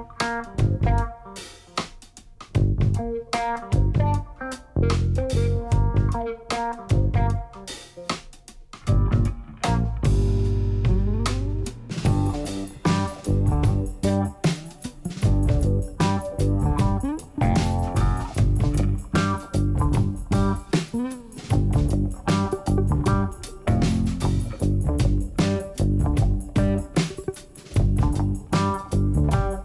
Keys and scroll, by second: 1.6 Tab, 3.3 shift+z, 6.0 1, 15.0 g, 15.8 z, 22.5 shift+z, 23.6 Tab, 27.1 1, 27.6 shift+z, 28.6 Tab.